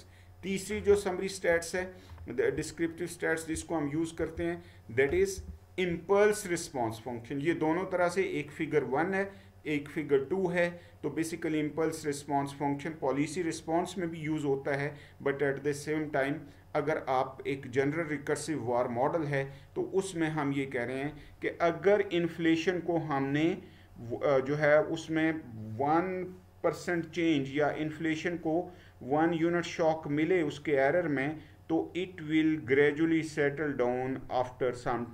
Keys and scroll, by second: 1.5 Right, 2.6-3.5 Down, 4.3 Down, 5.5 Up.